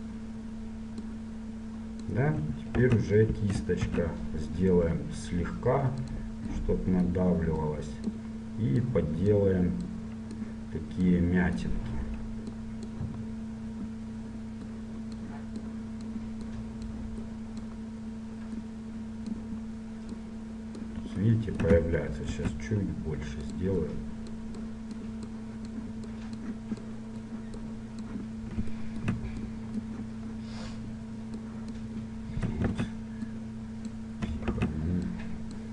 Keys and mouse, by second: 0.0 click, 1.2-3.0 drag, 3.0 ctrl+z, 4.1 shift+f, 6.7-22.2 drag, 22.2-23.3 middle drag, 22.6 shift+f, 23.6-31.2 drag, 31.6-32.8 drag, 32.8 ctrl+z, 34.6 ctrl+z.